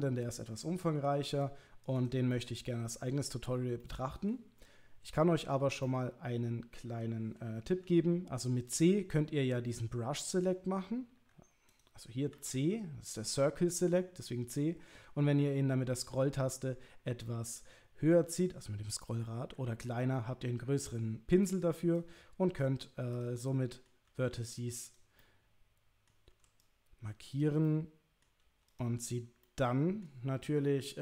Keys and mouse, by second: 0.9 c, 2.3-3.3 middle drag, 3.8 middle click, 5.8-7.4 middle drag, 12.3 c, 23.4 middle click, 24.1 c, 25.2 middle click, 26.3 c, 27.6 middle click, 28.4 c, 29.4 middle click.